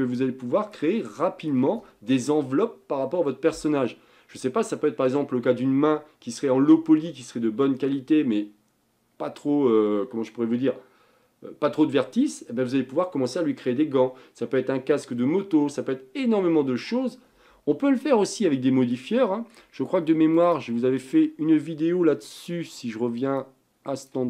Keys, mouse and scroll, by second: 1.7 shift+scroll up 1, 17.8-19.7 middle drag, 19.9 shift+middle click, 20.4 click, 22.4 click, 23.4-24.2 drag.